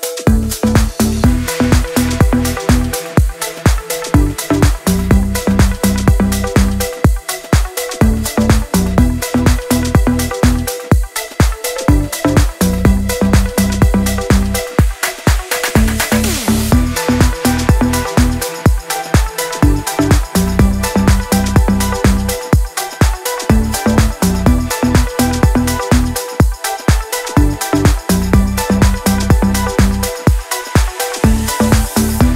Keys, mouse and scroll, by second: 2.4-2.8 drag, 3.7 ctrl+], 4.6 drag, 7.2-7.5 shift+click, 8.8-9.2 drag, 11.0 shift+drag, 12.9 click, 13.6 ctrl+z, 13.8-14.6 click, 15.1-15.4 shift+click, 15.8 Down, 16.0 click, 16.6-17.1 click, 17.5 ctrl+], 19.1 click, 20.8 click, 22.9 click, 28.9-29.2 shift+click, 29.6 Down, 30.4 Right, 30.9 Down, 31.8 click, 32.2 Down.